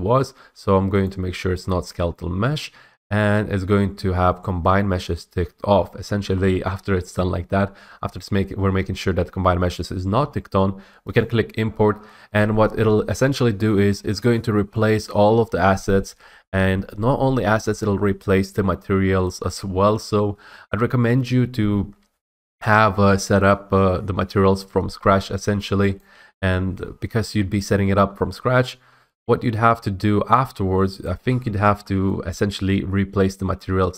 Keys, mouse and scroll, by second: 1.2 click, 11.3 click, 26.1 click, 31.2 click, 31.7 typing, 32.2 middle click.